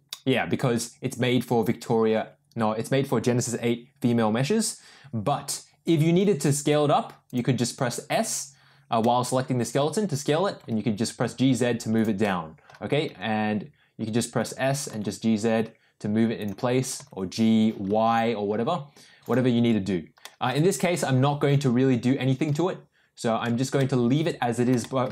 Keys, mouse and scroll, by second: 6.2 s, 9.1 middle click, 10.5 g, 12.3 middle click, 13.0 s, 14.8 g, 16.9 g, 20.0 ctrl+z, 20.2 middle drag, 21.0 ctrl+z, 23.7-24.5 middle drag, 24.8 shift+middle drag.